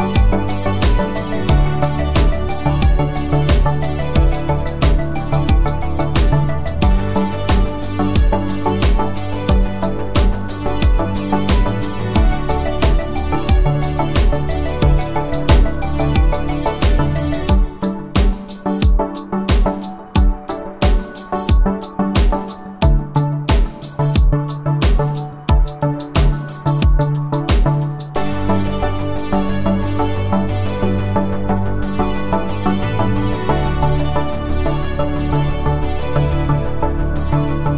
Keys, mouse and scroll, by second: 3.1 click, 5.9 ctrl+alt+click, 12.0 ctrl+alt+click, 13.9 click, 18.0 click, 21.1 ctrl+alt+click, 30.4-31.1 scroll up 1, 31.1 space, 31.3 click, 31.6-31.9 space, 33.4 ctrl+alt+click, 35.3-37.7 click.